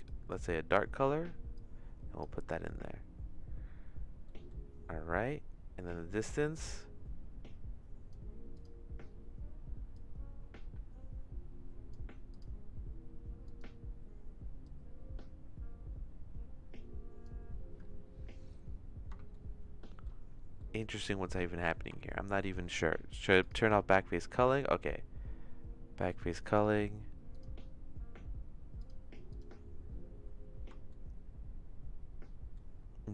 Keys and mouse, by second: 1.5 click, 4.3 middle click, 5.8-8.1 drag, 8.6 click, 10.0-11.9 drag, 12.3 click, 13.4 click, 14.6-17.3 drag, 19.3 shift+middle click, 20.6 middle click, 21.6 middle click, 21.9 shift+middle click, 23.4 click, 26.5 click, 28.8 click, 29.3 click, 30.9-32.5 shift+middle drag.